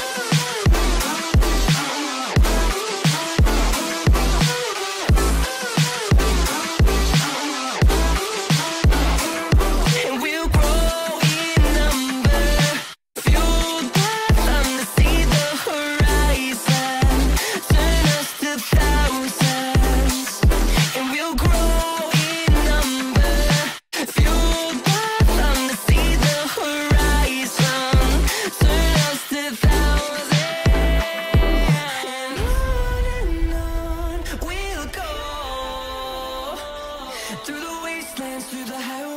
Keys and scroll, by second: 4.4 Escape, 5.9 ctrl+z, 10.8 5, 11.0 Return, 19.5 F3, 27.1 space, 27.3 F2, 31.9 F3.